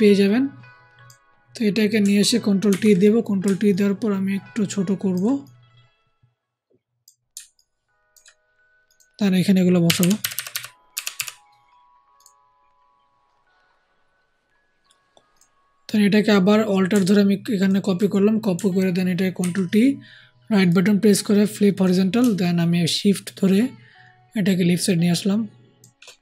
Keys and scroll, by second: 2.6 ctrl+t, 9.8 Right, 9.9 Right, 10.1 Down, 10.3 Down, 10.4 Down, 10.8 Right, 11.1 Right, 19.3 ctrl+alt+t.